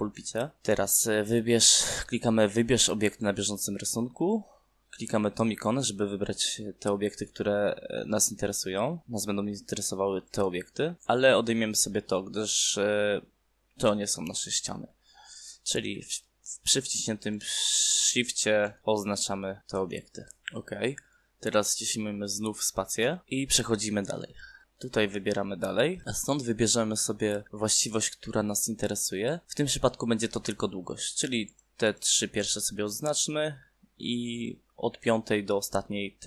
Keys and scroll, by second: 22.6 space.